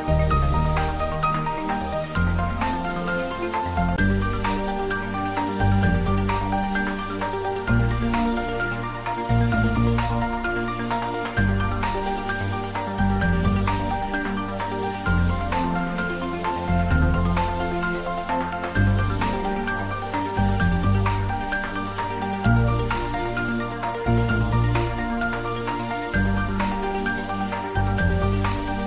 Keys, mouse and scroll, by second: 0.0 click, 0.8 s, 2.0 click, 2.4 scroll down 1, 4.0 s, 5.0 click, 6.2 g, 6.6 x, 11.6 click, 12.0-12.5 scroll up 1, 13.1 ctrl+z, 14.2-14.6 scroll down 1, 14.6 middle click, 15.2 Tab, 16.0-16.3 scroll down 1, 16.3-17.0 middle click, 19.8-20.3 scroll up 2, 20.3-20.9 middle click, 21.1-21.5 scroll down 2, 21.9-22.5 middle click, 25.0 click, 25.8 scroll up 1.